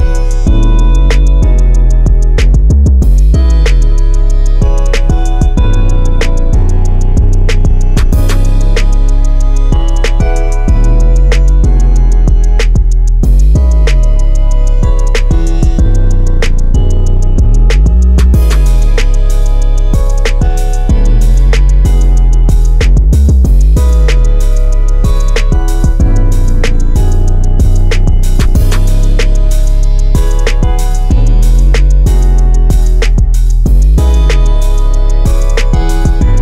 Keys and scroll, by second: 26.7 5, 27.0 Return, 30.7-33.3 typing, 34.6-36.4 typing.